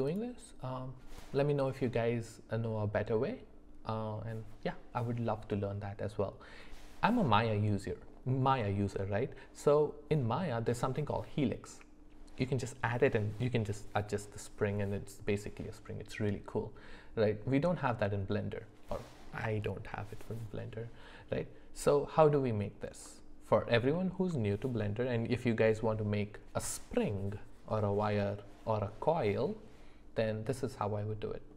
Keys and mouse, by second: 23.1 middle click, 23.9 shift+middle click, 30.6 middle click.